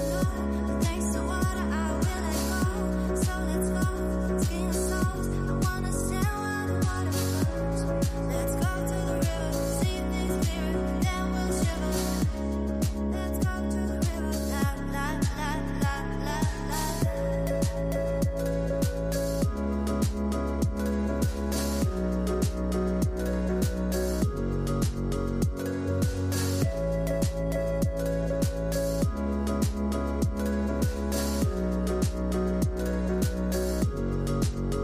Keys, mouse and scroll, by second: 3.5 shift+a, 9.4-13.6 drag, 13.6-17.8 middle drag, 17.8 shift+a, 24.0-25.2 drag, 25.2-28.3 middle drag, 28.3-31.5 drag.